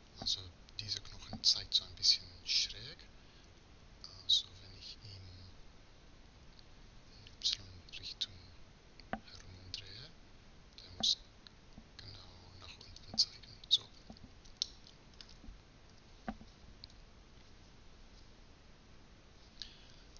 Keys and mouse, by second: 0.3-3.0 middle drag, 4.0 r, 13.7-15.6 middle drag, 15.6 z, 16.6 KP_3, 18.6 KP_1.